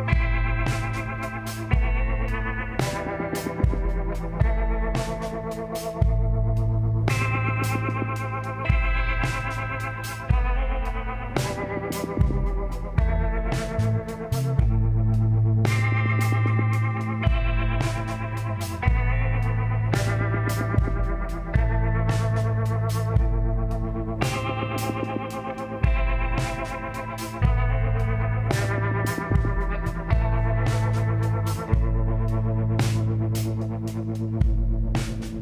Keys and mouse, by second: 1.7-3.6 drag, 3.8-5.7 drag, 9.4 i, 11.6-14.3 drag, 13.9 s, 16.9-18.6 drag, 18.8-20.0 drag, 20.0 middle click, 20.6 click, 22.4-25.1 drag, 30.9-33.6 drag, 33.9 s.